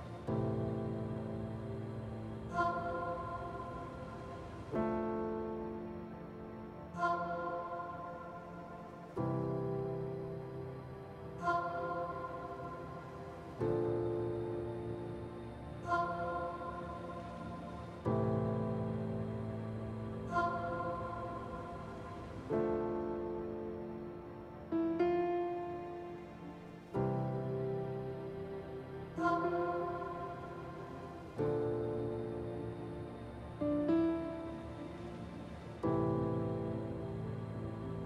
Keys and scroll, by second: 2.1 s, 10.4 Delete, 16.0 ctrl+z, 16.3 a, 18.4 ctrl+z, 20.8 ctrl+z, 23.4 b, 30.4 f, 36.4 f, 37.7 s.